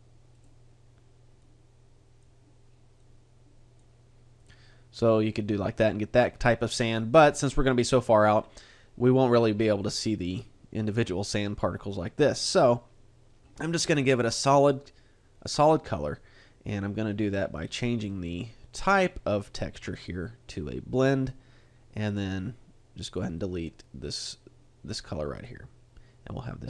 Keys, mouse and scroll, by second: 0.4 click, 17.7-18.9 scroll up 1, 18.9-19.5 scroll up 1, 19.5-20.0 scroll up 1, 20.0 click, 23.1 click, 23.4 click.